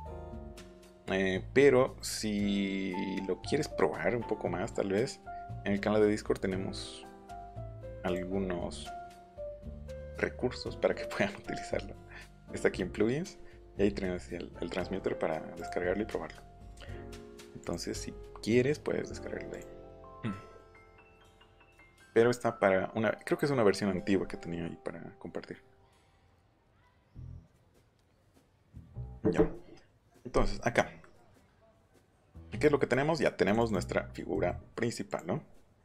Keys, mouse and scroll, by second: 0.6 click, 1.5-2.1 scroll up 1, 8.0 click, 9.9 click, 10.8-11.2 scroll down 2, 13.0-13.4 scroll down 2, 15.5 click, 17.5 click, 19.5 click, 20.3 middle click, 20.8 middle click, 21.3 middle click, 21.5 click, 21.7 click, 31.5 middle click, 32.1 middle click, 32.6 middle click, 32.9 middle click, 33.4 click, 33.6 click, 35.0 click, 35.4 middle click, 35.6 middle click.